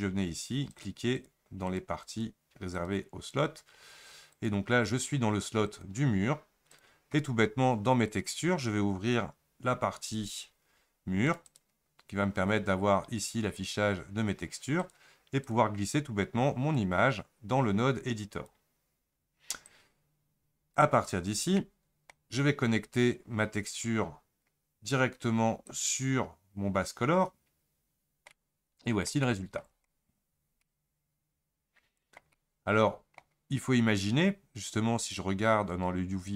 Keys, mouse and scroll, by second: 1.2 click, 1.7 click, 2.1 click, 2.8 click, 5.7-18.5 drag, 27.0 click, 28.4-29.9 middle drag, 29.9-30.5 scroll up 4, 30.8-36.3 ctrl+middle drag.